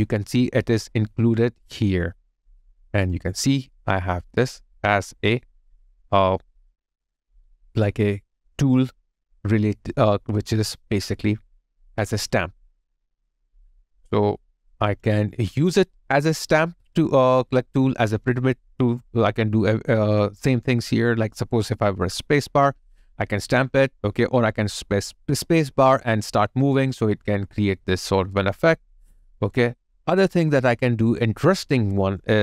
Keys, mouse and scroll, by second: 3.1 alt+click, 8.5 alt+click, 11.1 alt+click, 11.6 ctrl+click, 12.6 alt+click, 14.6 alt+click, 15.2 alt+middle click, 15.5 alt+click, 16.0 alt+middle click, 16.7 alt+right click, 22.8 space, 29.9 ctrl+z.